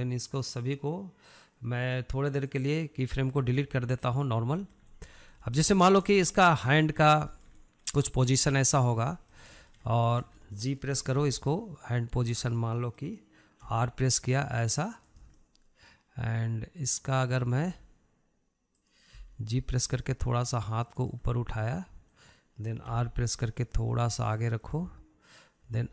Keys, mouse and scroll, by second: 0.5-1.8 drag, 1.8-4.9 right drag, 4.9-5.7 middle drag, 5.7 scroll up 1, 6.0-6.6 shift+middle drag, 6.6 scroll up 1, 6.8-7.4 shift+middle drag, 7.4 scroll up 1, 7.6-8.4 shift+middle drag, 8.4 scroll down 2, 8.7-10.2 shift+middle drag, 10.2 drag, 10.5-12.5 middle drag, 12.5 g, 13.9-15.1 middle drag, 15.1 r, 16.7-19.1 middle drag, 19.1 r, 20.5 g, 22.7-24.3 middle drag, 24.3 r.